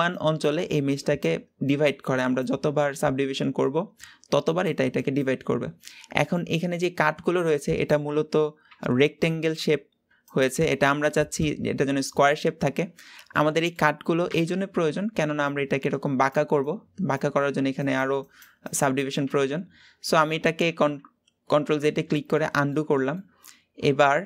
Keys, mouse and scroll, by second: 13.3-19.2 middle drag, 22.3-24.2 middle drag.